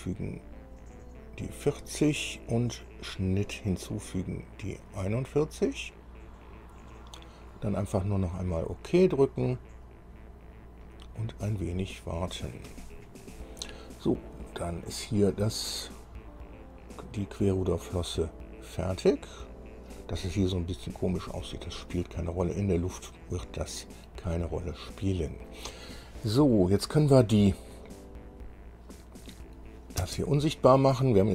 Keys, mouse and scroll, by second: 0.3 click, 3.3 click, 5.0 click, 8.8 click, 12.1 click, 14.7-20.3 middle drag, 21.0 scroll up 2, 21.4-25.8 middle drag, 26.4-26.9 scroll down 4, 29.4 click, 30.2 space.